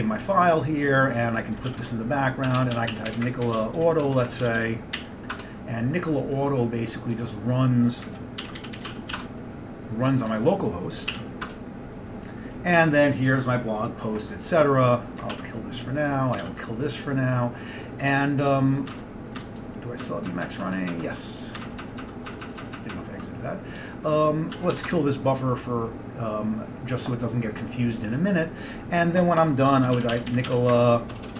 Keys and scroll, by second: 1.1-5.6 typing, 8.4-9.7 typing, 11.2 ctrl+l, 11.6 Return, 15.4 ctrl+w, 16.5 ctrl+c, 19.0 alt+Tab, 19.5 alt+Tab, 19.7 alt+Tab, 20.1 alt+Tab, 20.4-21.9 alt+Tab, 22.9 alt+Tab, 24.6 ctrl+x, 24.8 k, 25.2 ctrl+w, 25.2 ctrl+c, 25.2 alt+Tab, 25.2 ctrl+x, 25.2 Return, 25.2 k, 29.7-31.3 typing.